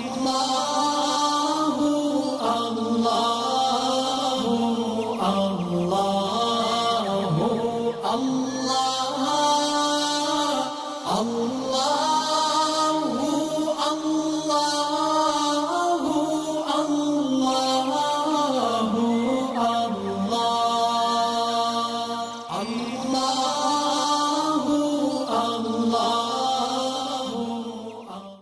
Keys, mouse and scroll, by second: 5.4 click, 6.5 alt+scroll up 1, 6.9-10.1 drag, 10.6-11.1 alt+scroll down 2, 11.1-11.5 scroll down 1, 11.6-12.1 alt+scroll up 2, 12.1-15.0 drag, 16.2 alt+scroll down 1, 16.6 space, 16.7 click, 17.8-18.2 alt+scroll down 1, 18.2 space, 18.6-19.1 click, 18.6 space.